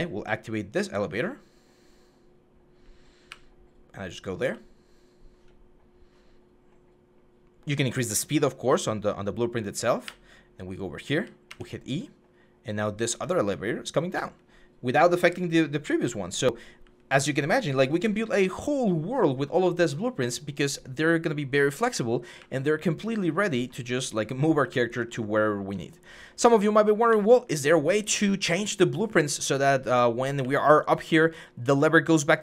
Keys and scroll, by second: 0.0-0.8 typing, 2.8-4.1 typing, 6.3 w, 9.8-11.2 typing, 13.2 a, 13.9 a, 15.1-16.9 typing, 22.2-23.3 typing, 24.4-27.1 typing, 29.5-32.4 typing.